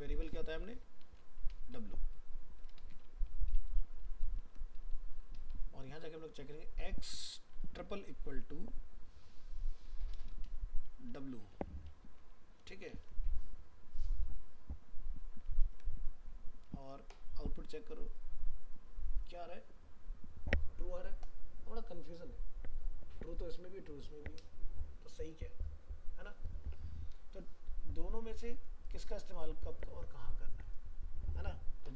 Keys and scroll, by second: 4.0 ctrl+s, 12.6 ctrl+s.